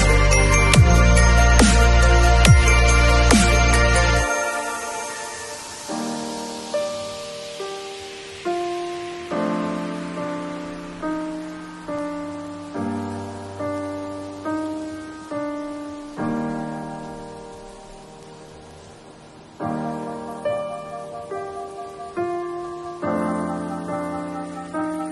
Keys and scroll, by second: 1.4 v, 12.9 super+u.